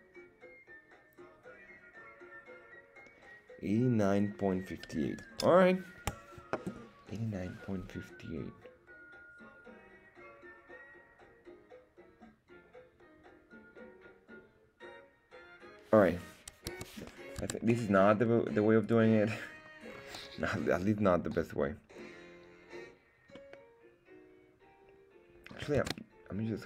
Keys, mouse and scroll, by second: 16.8 Tab, 17.5 Tab, 17.8 middle click, 18.8 click, 18.8 right click, 19.5-19.9 scroll down 2, 19.9-20.4 scroll up 2, 23.4-25.6 middle drag, 25.8 ctrl+Tab.